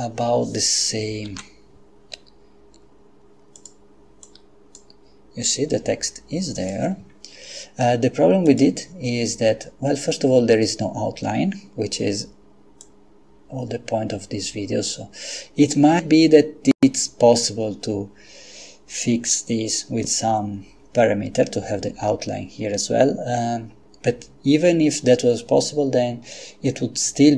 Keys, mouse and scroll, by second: 1.3 g, 3.6 click, 4.3 click, 6.6 click, 8.5 click, 12.8-17.9 drag.